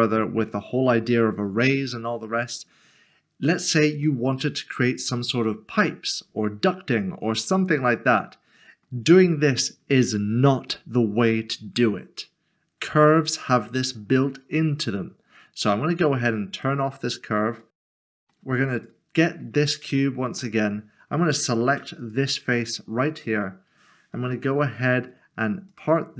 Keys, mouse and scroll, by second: 4.0 shift+middle click, 4.2 middle click, 16.5 click, 17.9 middle click, 18.8 click, 19.8 Tab, 20.4 Tab, 20.6 middle click, 22.0 click, 24.5 p, 25.7 p.